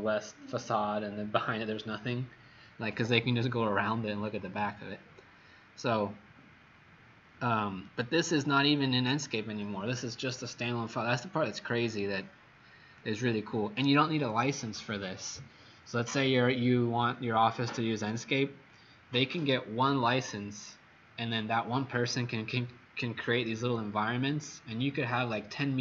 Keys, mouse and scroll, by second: 6.1-6.5 scroll up 3, 7.0-7.3 scroll up 3, 7.8 right click, 13.2 click.